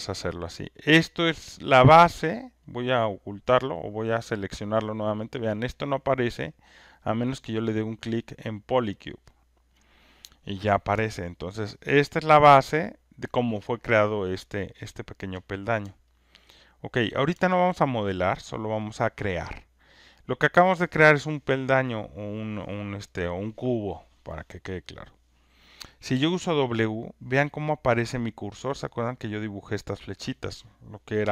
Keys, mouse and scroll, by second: 1.8 click, 2.7 click, 3.6 click, 4.3 click, 7.0 click, 10.6-12.1 alt+drag, 13.1-16.9 alt+drag, 18.5 alt+middle click, 26.1 w.